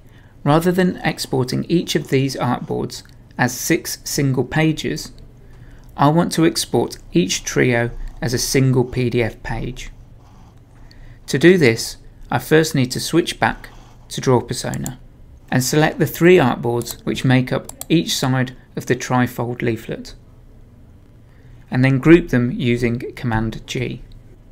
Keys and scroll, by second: 23.1 super+g.